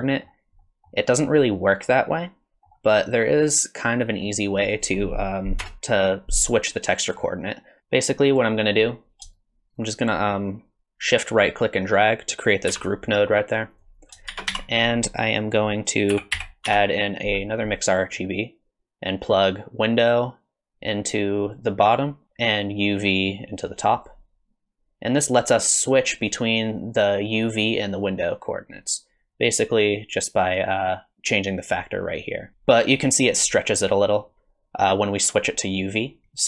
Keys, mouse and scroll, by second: 0.1 middle click, 0.7 middle click, 1.5 middle click, 3.1 middle click, 4.6 click, 5.6 KP_0, 7.5 middle click, 7.8 middle click, 7.8 click, 7.8 scroll down 3, 9.4 shift+right click, 12.7 g, 14.0 click, 14.3 shift+a, 20.2 click, 23.2 click, 29.3 click, 36.2 middle click.